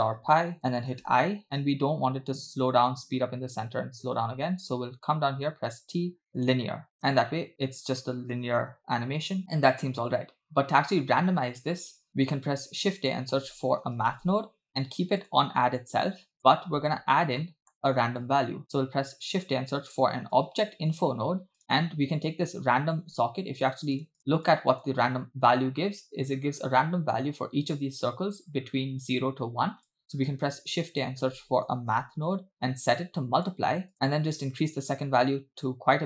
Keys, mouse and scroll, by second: 1.4 i, 1.9 space, 4.1 space, 5.8 t, 7.0 space, 11.0 space, 12.6 shift+a, 16.1 click, 17.4 middle click, 18.1 shift+a, 23.2 click, 23.9 ctrl+shift+click, 24.0 ctrl+shift+click, 24.5 ctrl+shift+click, 24.7 ctrl+shift+click, 26.1-26.5 scroll down 4, 29.9 click, 30.3 shift+a, 33.9 click, 34.8-36.0 drag.